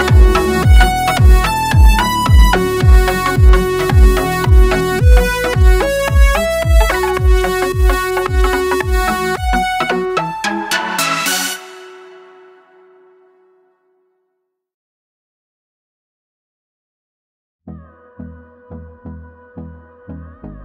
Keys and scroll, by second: 0.0-7.2 typing, 7.3 Tab, 8.3 Tab, 8.3-12.0 typing, 11.6 Tab, 14.7-20.6 typing, 16.6 Tab.